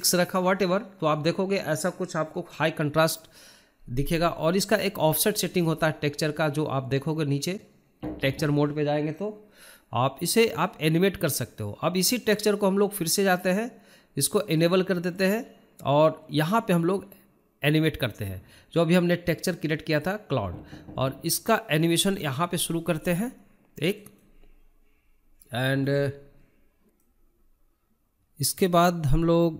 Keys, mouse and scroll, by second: 10.4-12.8 scroll down 10, 15.7-18.5 drag, 18.7-20.0 scroll down 1, 22.0-24.4 drag, 24.4-26.4 right drag, 26.6-28.6 drag, 28.7-29.5 drag.